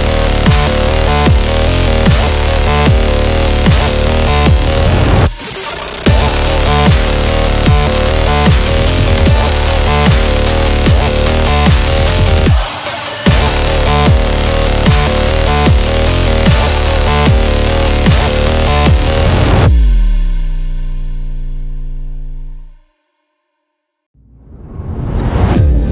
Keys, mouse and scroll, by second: 4.1 scroll up 1, 4.2 scroll down 1, 4.3 scroll up 1, 4.6 ctrl+t, 5.0 scroll up 1, 5.5 shift+click, 7.9 Return, 8.1 scroll down 1, 8.5 scroll up 1, 8.7 space, 8.9 click, 9.0 space, 9.2 scroll down 1, 10.3 click, 10.5 click, 14.2 click, 17.0-23.1 drag.